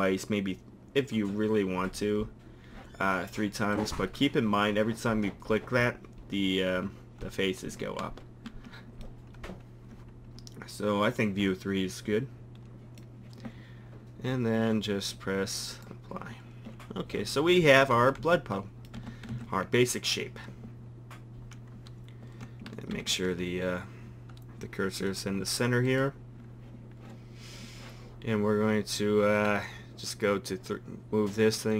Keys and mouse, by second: 1.0-1.7 middle drag, 3.7-5.5 drag, 5.5 middle drag, 8.0 Tab, 8.5 Tab, 15.6-17.5 drag, 17.0 Tab, 17.7 a, 18.0 a, 18.2 a, 19.0 Tab, 19.3 a, 22.9 shift+c, 26.4-28.0 drag, 29.4-31.4 drag.